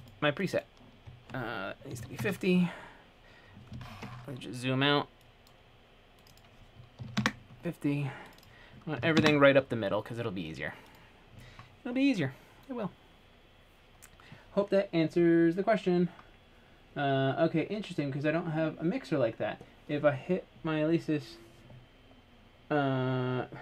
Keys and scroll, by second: 3.1-3.9 typing, 6.9-7.7 typing, 9.2 typing.